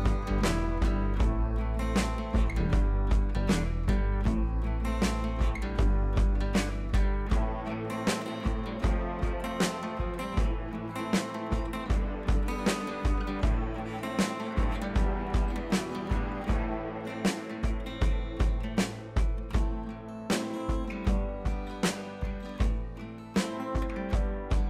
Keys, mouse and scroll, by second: 0.2 click, 4.2 z, 5.0 b, 7.0-8.9 drag, 9.3 click, 10.5 scroll up 1, 10.7 ], 10.8 ], 10.9 ], 11.1 ], 11.3-14.0 drag, 14.0 scroll up 1, 16.5 click, 18.0 scroll up 1, 19.0-20.5 typing, 19.5 scroll up 1, 21.7 click, 21.8 space, 21.9 click, 22.1 space, 23.3 shift+click.